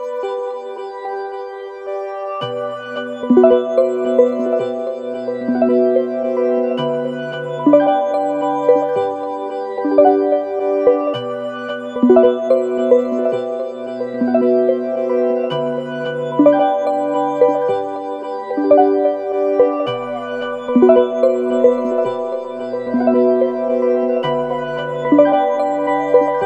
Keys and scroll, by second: 1.3 typing, 8.8 F9, 11.1 ctrl+z, 12.7-13.5 typing, 15.4 typing, 18.5 ctrl+z, 19.1 ctrl+=, 23.2 ctrl+=, 23.9 ctrl+-, 25.3 ctrl+=, 26.1 u.